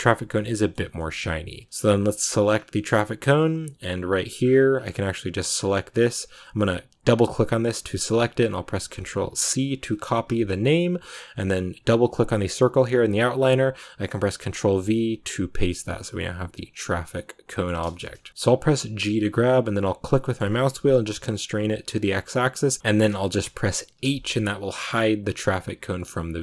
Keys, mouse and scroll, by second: 0.6 scroll down 2, 0.9 shift+middle click, 1.0-1.6 shift+scroll up 1, 1.6 right click, 2.2 shift+middle click, 2.4 scroll up 2, 2.6-6.9 middle drag, 6.9 click, 11.8 click, 12.4-16.4 drag, 16.9 scroll down 1, 17.0 middle click, 17.9 scroll down 2, 18.3 middle click, 19.0 g, 23.1 shift+middle click, 23.9 h.